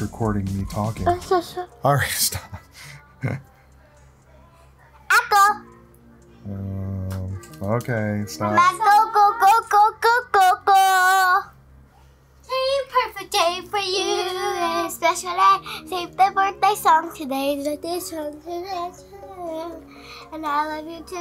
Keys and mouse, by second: 0.0 click, 0.1 click, 0.5 click, 0.7 space, 0.8 click, 1.0 click, 1.3 click, 2.4 click, 3.0 click, 3.2 click, 3.5 click, 4.0 click, 4.3 ctrl+z, 4.4 click, 4.9 click, 5.1 d, 5.2 click, 5.5 ctrl+-, 5.7 click, 5.7 space, 5.9 click, 5.9 space, 6.1 click, 6.7 click, 7.2 click, 7.9 click, 8.2 click, 8.4 click, 8.8 click, 9.1 click, 9.2 ctrl+z, 9.2 click, 9.4 f, 9.5 click, 9.6 click, 9.9 click, 10.3 click, 10.7 click, 11.1 ctrl+z, 11.2 click, 11.5 click, 11.8 click, 11.8 x, 12.1 click, 12.3 click, 12.7 x, 12.8 click, 13.6 x, 14.1 click, 14.2 x, 14.3 ctrl+alt+click, 14.5 click, 14.5 ctrl+z, 14.6 ctrl+alt+click, 14.8 click, 15.0 click, 15.2 click, 15.5 space, 15.6 click, 15.9 click, 16.8 click, 17.1 space, 17.2 click, 17.5 click, 18.3 click, 18.6 click, 19.0 click, 19.3 click, 20.0 click, 20.3 click, 21.0 click.